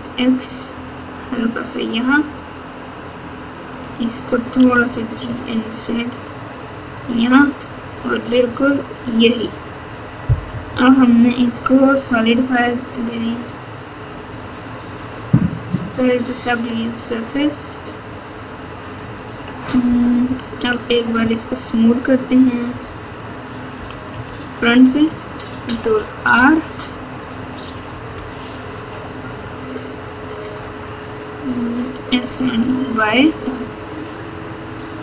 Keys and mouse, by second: 3.2 click, 4.5 g, 7.4 click, 8.5 click, 9.1 Tab, 10.4 KP_6, 10.6 KP_6, 12.9-15.6 drag, 17.8 click, 18.9 Tab, 20.2 KP_6, 20.4 KP_6, 21.1 KP_1, 22.6 KP_9, 23.7 KP_1, 24.1 KP_3, 25.6 ctrl+r, 31.7 s.